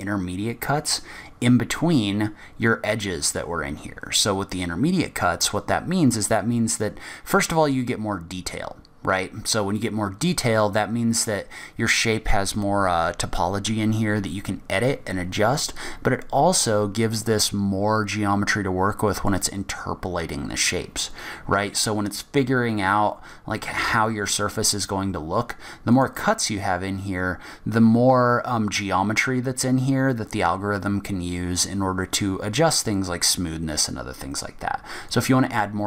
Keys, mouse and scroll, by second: 19.5 middle click, 26.1 click, 26.3 click, 35.3 click.